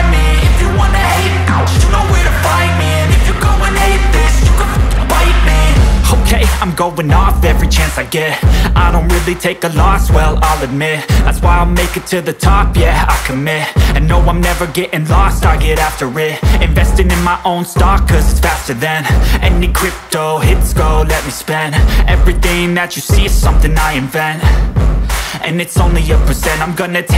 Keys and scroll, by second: 0.8 ctrl+z, 3.9 Down, 4.5 Up, 6.1 Down, 7.1 Up, 8.0 Down, 8.9 Up, 9.7 Down, 12.3 Up, 13.8 Down, 14.0 Up, 14.2 Down, 14.5 Up, 20.0 space, 21.9 ctrl+x, 22.4 ctrl+v.